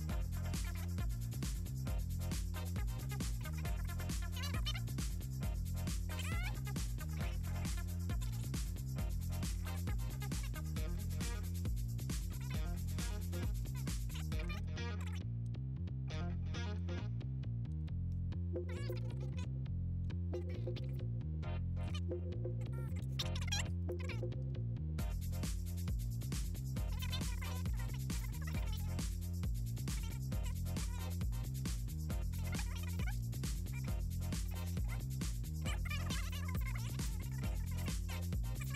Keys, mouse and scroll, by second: 0.6 ctrl+c, 1.2 click, 2.0 Down, 2.4 click, 2.7 click, 3.4 click, 3.7 click, 4.6 4, 4.8 click, 5.1 click, 6.5 r, 7.4 click, 7.7 click, 7.9 click, 8.4 click, 9.5 shift+Down, 10.2 click, 11.1 shift+Right, 12.5 Down, 12.7 Down, 14.8 Right, 15.8 Left, 17.0 click, 18.6 click, 19.2 click, 19.6 click, 20.1 click, 20.4 click, 20.6 click, 21.2 click, 21.4 click, 21.6 click, 22.1 click, 22.3 click, 22.6 click, 22.9 click, 23.5 click, 24.6 shift+Down, 24.7 shift+Down, 25.1 shift+Down, 25.7 Down, 27.6 ctrl+click, 28.2 click, 28.8 Down, 29.0 Down, 30.5 click, 30.7 click, 31.9 shift+click, 32.3 click, 32.7 click, 33.8 click, 34.1 click, 34.7 click, 35.8 click, 36.6 click, 36.8 middle click, 37.1 click, 37.7 click, 37.9 click, 38.2 middle click.